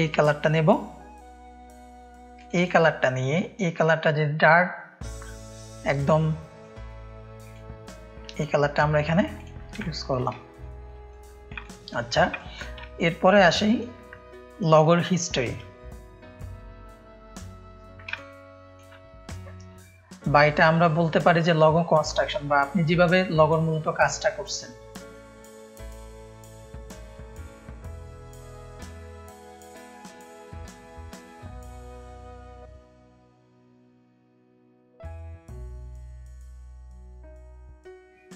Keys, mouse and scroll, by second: 2.3 click, 3.6-6.6 drag, 7.4-9.2 drag, 9.3 click, 9.8 ctrl+space, 9.8 ctrl+click, 10.3 click, 10.3 space, 10.9 click, 11.6 click, 11.6 space, 12.3 click, 12.3 space, 12.9 click, 12.9 space, 13.5 click, 15.1 click, 15.1 space, 18.1 ctrl+space, 18.1 ctrl+click, 25.0-26.2 drag, 27.6-32.0 typing, 32.4 click, 32.6 click, 33.2 alt+shift+click, 33.8 click, 34.4 ctrl+space, 34.4 ctrl+click, 35.1 click, 35.5 ctrl+space, 35.5 ctrl+click, 35.9 click.